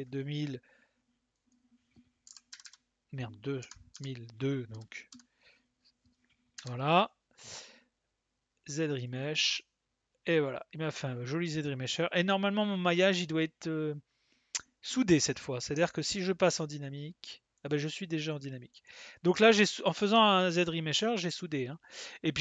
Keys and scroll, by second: 2.2 KP_2, 2.5 KP_0, 3.6 BackSpace, 5.1 Return.